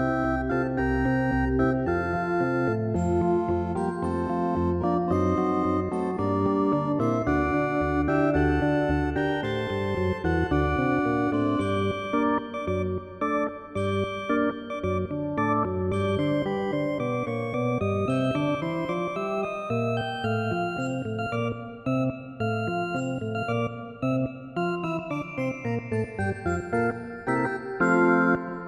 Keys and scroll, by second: 5.0 ctrl+=, 12.1 ctrl+z, 27.7 ctrl+i.